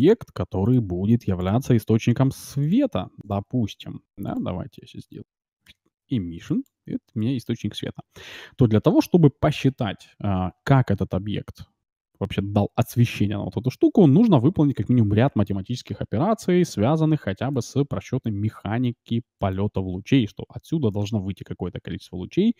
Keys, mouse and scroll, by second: 0.2 r, 1.0 s, 2.6-6.0 drag, 6.4-8.2 drag, 7.2-9.0 middle drag, 7.9 shift+z.